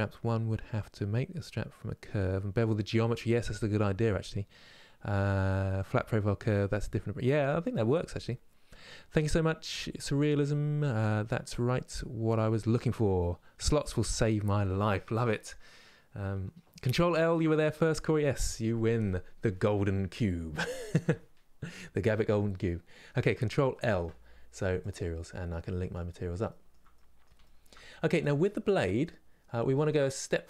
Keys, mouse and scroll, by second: 24.5 ctrl+l, 25.6-26.1 scroll down 1, 26.1-27.9 shift+middle drag, 27.9 click, 28.3 middle click, 29.0 scroll down 2, 29.4-30.4 shift+middle drag.